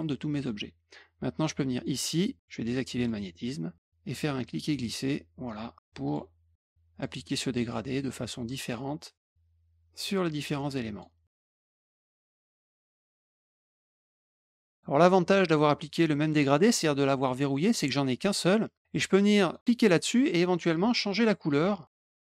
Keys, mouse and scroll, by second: 0.3 click, 1.7 click, 2.9 click, 4.0 click, 6.5 click, 7.6-8.6 drag, 10.0 click, 11.4 shift+click, 11.5 click, 11.6 click, 11.7 click, 12.3 click, 12.5 click, 12.6 click, 12.7 click, 12.9 click, 13.0 click, 13.1 click, 13.3 click, 13.4 click, 13.6 click, 13.7 click, 13.8 click, 14.1 click, 14.2 click, 14.4 click, 14.6 click, 17.4 click, 19.3 click.